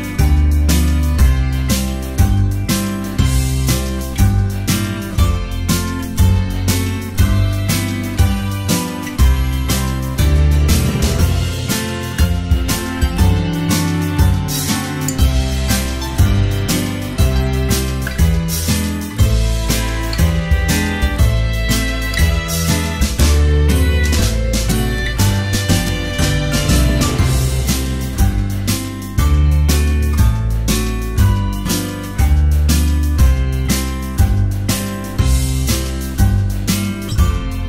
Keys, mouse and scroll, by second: 1.3 ctrl+s, 1.9 space, 2.5 space, 2.8 space, 3.1 ctrl+s, 6.5 space, 7.4 space, 8.5 space, 11.3 right click, 11.9 space, 12.7 ctrl+z, 12.8 space, 13.4 space, 14.1 ctrl+z, 14.9-20.5 typing, 21.1 ctrl+s, 22.1 space, 23.4 ctrl+z, 23.5 space, 24.1 ctrl+z, 25.4-29.6 typing, 26.8 ctrl+z, 31.9 space, 32.5 space, 33.1 space, 33.5 space, 34.7 space, 35.3 space.